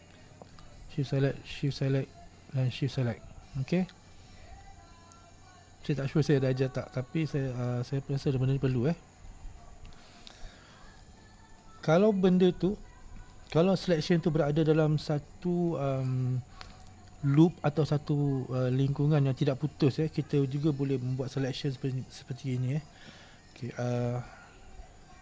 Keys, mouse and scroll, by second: 0.6 shift+right click, 1.7 shift+right click, 2.7 shift+right click, 3.2-6.2 middle drag, 8.0-8.4 scroll down 1, 8.4-8.9 scroll up 1, 8.9 middle click, 9.4-9.9 scroll down 1, 9.9-10.7 scroll up 4, 10.7-11.1 scroll down 2, 11.1-13.6 middle drag, 13.6 scroll up 2, 21.1 scroll down 2, 21.6-23.6 scroll up 2, 23.6 right click.